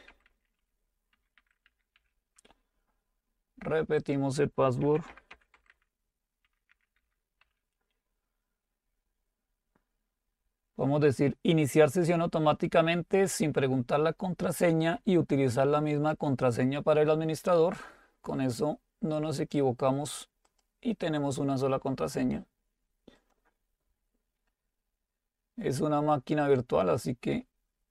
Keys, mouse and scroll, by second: 0.0-2.5 typing, 4.0-5.4 drag, 4.6-7.9 typing, 11.9 click, 16.0 click, 18.6-22.0 drag, 23.2 click, 26.9 click.